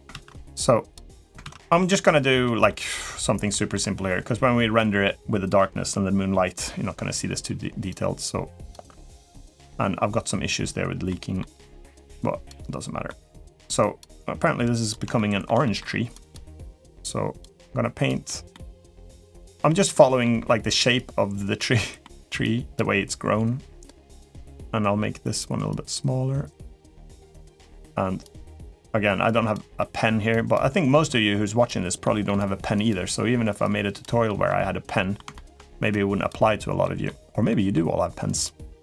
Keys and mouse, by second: 0.0 ctrl+z, 0.3 click, 1.2 ctrl+z, 2.2 middle click, 3.3 middle click, 4.5 middle click, 7.6 click, 8.8 middle click, 10.9 middle click, 11.8 click, 12.8 middle click, 13.6 click, 14.4 click, 14.9 shift+middle click, 15.4 middle click, 15.9 click, 16.3 middle click, 17.2 click, 18.3 middle click, 19.0 click, 19.7 middle click, 20.7 click, 21.6 middle click, 22.2 click, 25.6-26.6 drag, 28.0 click, 29.0 click, 29.6 middle click, 30.1 click, 30.7 middle click, 31.2 click, 31.8 middle click, 32.5 click, 33.4 click, 34.0 middle click, 34.6 middle click, 35.1 shift+middle click, 35.7 click, 36.6 middle click, 37.3 middle click, 38.0 click, 38.7 click.